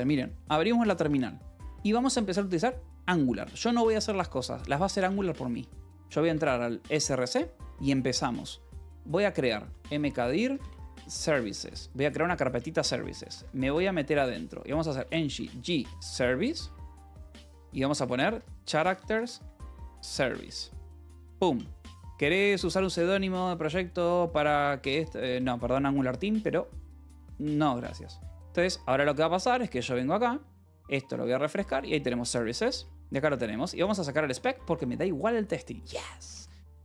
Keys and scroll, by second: 0.1 alt+p, 0.3 w, 4.9-6.3 typing, 6.4 Tab, 6.4 Return, 9.3-20.7 typing, 13.7 Return, 25.3 Return, 28.9 alt+j, 29.2 Return, 31.4-36.8 typing, 31.6 Return, 34.3 Return.